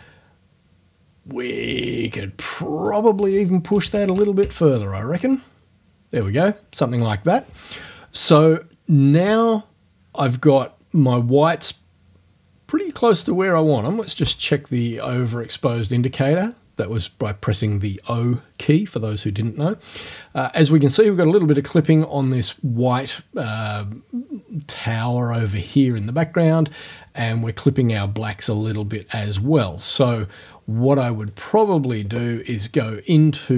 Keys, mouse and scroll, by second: 2.9 right click, 3.7 KP_1, 3.9 KP_Decimal, 4.0 KP_2, 4.2 KP_5, 4.4 KP_Enter, 14.2 o, 31.2 click.